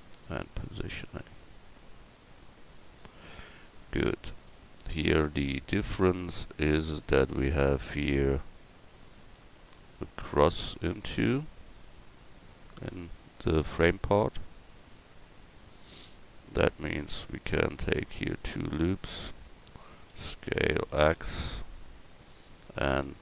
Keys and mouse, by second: 4.7 Tab, 16.5 Tab, 17.9 ctrl+r, 19.8 s.